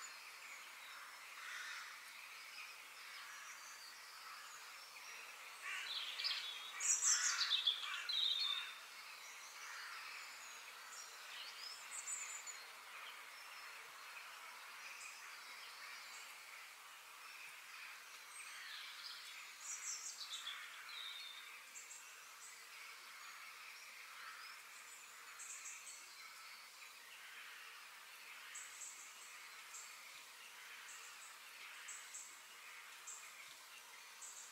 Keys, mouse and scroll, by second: 1.8 shift+d, 4.1 shift+d, 6.9 shift+click, 7.5 shift+click, 8.0 shift+click, 8.5 shift+click, 9.8 ctrl+j, 13.0-13.5 drag, 14.0 click, 16.4 scroll down 2, 16.7-18.6 middle drag, 18.7 click, 19.3 click, 19.6-22.4 middle drag, 22.4-23.4 drag, 23.7 click, 24.0-25.8 middle drag, 25.8-26.2 scroll down 2, 26.2 middle click, 26.9-27.3 scroll up 2, 27.3 shift+middle click, 28.2-28.5 scroll down 1, 28.5-30.0 middle drag, 30.0-30.3 scroll down 2, 30.3-33.2 middle drag, 33.6 click, 34.3 f.